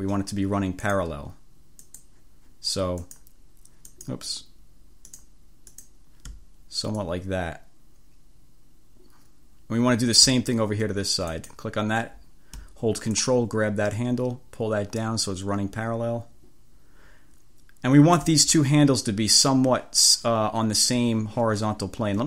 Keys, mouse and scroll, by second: 0.9 click, 2.0 click, 3.1 click, 4.0 click, 5.2 click, 5.9 click, 7.1-10.5 drag, 11.5 click, 13.2-18.5 drag.